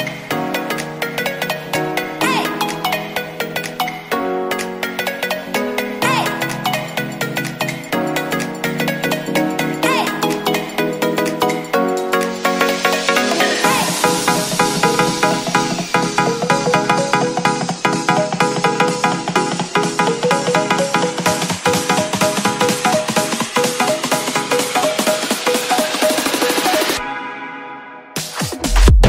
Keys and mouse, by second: 3.4 s, 6.0 i, 10.6 Tab, 10.9 click, 12.1-13.5 drag, 14.1-14.6 middle drag, 15.2-16.0 middle drag, 17.7-22.0 shift+drag, 22.3-23.2 middle drag, 24.2-28.1 shift+drag.